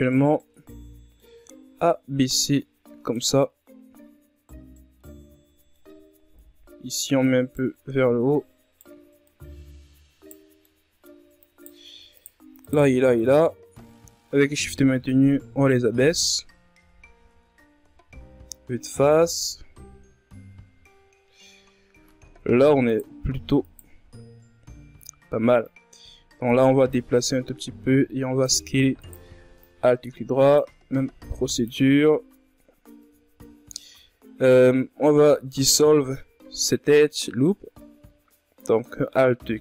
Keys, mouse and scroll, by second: 0.2-1.7 drag, 1.7-4.7 middle drag, 4.7 right click, 6.4 right click, 7.6 right click, 9.1 middle click, 9.8 right click, 10.6 shift+right click, 11.1 shift+right click, 11.4-12.5 middle drag, 12.5 g, 15.2 KP_1, 15.8 Tab, 16.3-17.0 scroll down 4, 17.0-17.6 scroll up 4, 17.7-19.0 scroll down 9, 18.6 d, 19.5-20.5 scroll up 7, 20.5 Tab, 21.3 alt+right click, 22.1 alt+right click, 24.1-25.7 drag, 25.7 s, 27.4 alt+right click, 28.0-29.3 drag, 29.3 s, 30.2 Tab, 30.4-31.1 scroll down 3, 31.1 scroll up 5, 31.5 Tab.